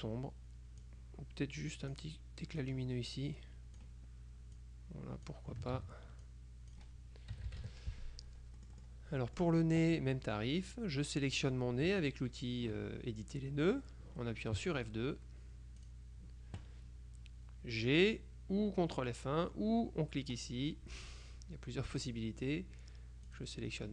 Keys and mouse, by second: 0.9-2.5 drag, 2.7-4.4 drag, 4.7-5.9 drag, 5.8 ctrl+z, 6.3 ctrl+click, 7.5 KP_Subtract, 8.7 click, 9.6 click, 12.0 F2, 14.7 F2, 15.9 click, 20.4 click, 22.1 click, 23.3 click.